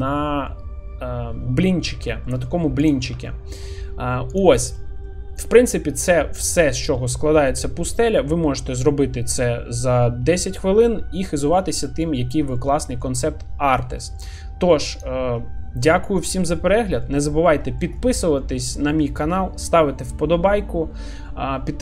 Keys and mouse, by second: 0.2 middle click, 2.3 shift+middle click, 2.8 click, 3.3 shift+middle click, 5.1-5.5 middle drag, 7.0 middle click, 11.4 middle click, 12.2 shift+middle drag, 12.6-13.0 middle drag, 14.0 shift+middle drag, 14.4 middle click, 15.4 middle click, 16.3 shift+middle click, 16.7 middle click, 17.6 shift+middle drag, 18.0 middle click, 19.0 shift+middle click.